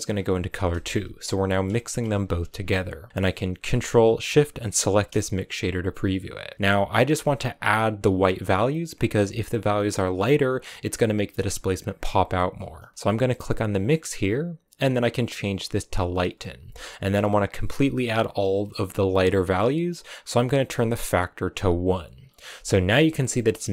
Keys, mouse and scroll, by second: 0.5 scroll down 1, 0.6-1.9 middle drag, 1.9-3.6 scroll up 4, 4.6 ctrl+shift+click, 13.7-16.7 drag, 20.3-22.1 drag, 22.1-22.5 scroll down 4, 22.5 middle click, 23.0-23.5 scroll up 4, 23.2 middle click, 23.5 shift+middle click.